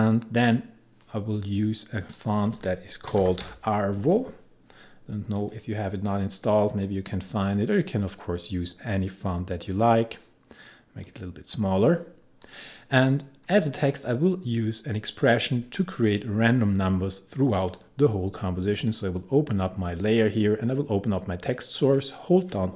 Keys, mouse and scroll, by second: 2.9-3.9 typing, 5.4-12.5 drag, 18.9 click.